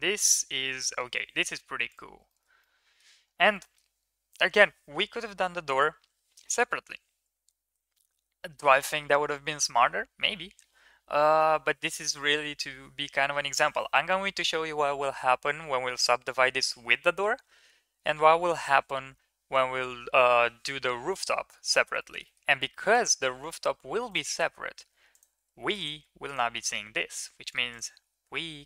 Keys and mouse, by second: 0.3 KP_1, 2.1 shift+middle click, 2.4-2.8 middle drag, 3.4 middle click, 21.8 shift+middle click, 22.0 middle click, 23.0 Tab, 24.8 3, 26.9 x, 28.0 Tab.